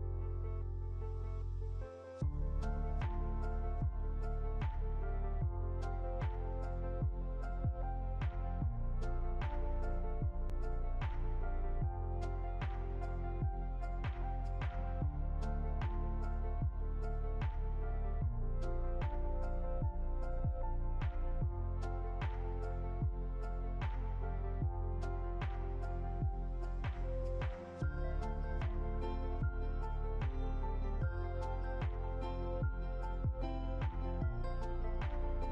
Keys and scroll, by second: 6.5 Left, 15.5 Up.